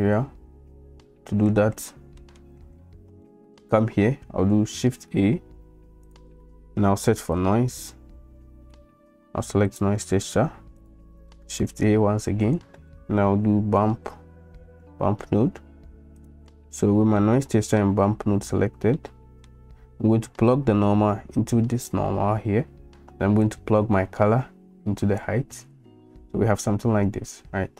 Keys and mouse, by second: 2.3 shift+click, 3.4 shift+middle click, 3.4 shift+click, 3.5 shift+middle click, 4.8 shift+a, 11.5 shift+a, 17.3 middle click, 17.4 click, 18.4 n, 18.9 click, 19.2 middle click, 20.5-22.1 drag, 23.4-25.4 drag.